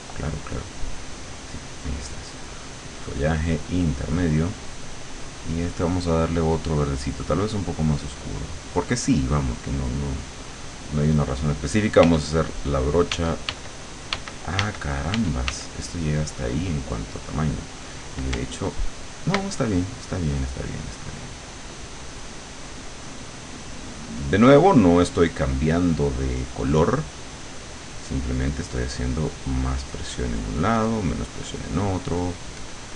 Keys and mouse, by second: 0.6 click, 1.6 click, 4.5 click, 6.2 click, 7.2-8.7 drag, 12.0 f, 13.2 d, 15.2 f, 16.2-17.6 drag, 19.8-25.6 ctrl+drag, 31.0 click, 31.4 click, 31.9 click, 32.2 click, 32.6 click.